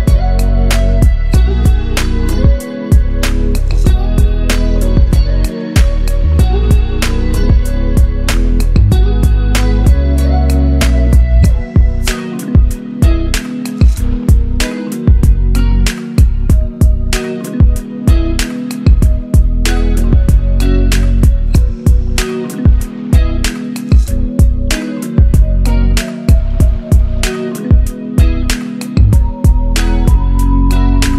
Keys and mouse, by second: 8.5-12.5 shift+drag, 18.5 click, 21.0-22.9 drag, 27.0 middle click, 30.9 click.